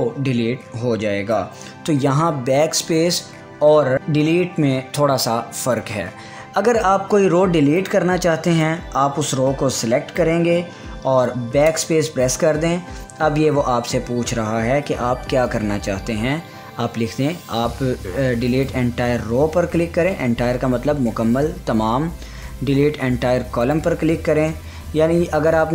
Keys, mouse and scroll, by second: 1.7 ctrl+z, 8.3-13.0 drag, 19.1 click, 24.2 click.